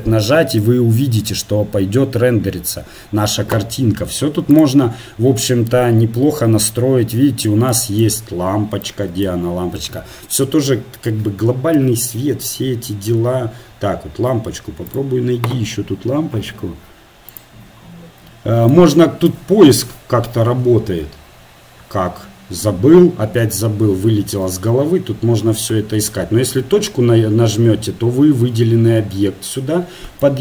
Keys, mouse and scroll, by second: 0.1 shift+z, 4.5-6.5 right drag, 7.7-12.0 middle drag, 12.0 KP_Divide, 12.6 middle click, 14.9-16.7 drag, 18.7 right click, 19.3-20.4 drag, 20.4-22.6 right drag, 22.6-27.6 middle drag.